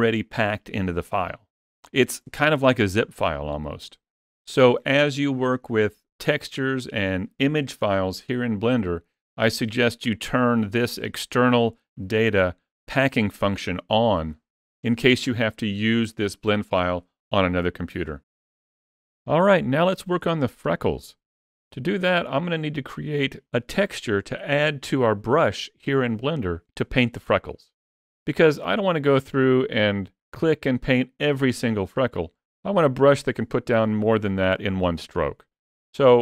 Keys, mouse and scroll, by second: 9.8 click, 21.5-21.9 scroll up 3, 21.9 shift+middle click, 22.5 middle click, 35.9 scroll down 1.